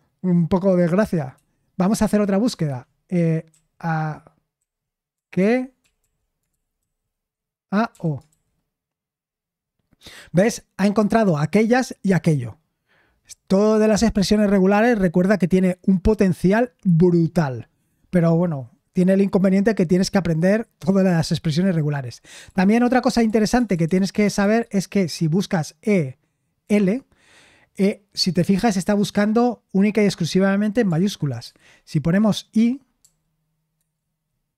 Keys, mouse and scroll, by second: 1.3 Escape, 2.6-3.5 typing, 4.5-8.2 typing, 22.4-24.4 typing, 26.6 typing, 31.4 typing, 33.0 i, 33.7 Return.